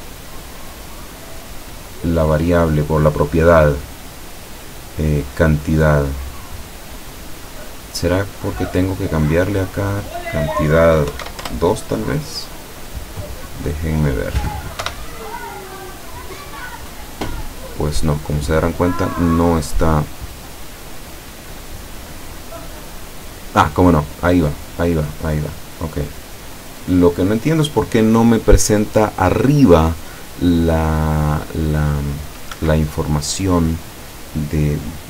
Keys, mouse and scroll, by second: 1.0 click, 7.8 click, 8.5 click, 9.8 click, 11.2 End, 11.3 2, 11.5 Return, 13.3 click, 13.8 click, 14.9 p, 32.7 Escape.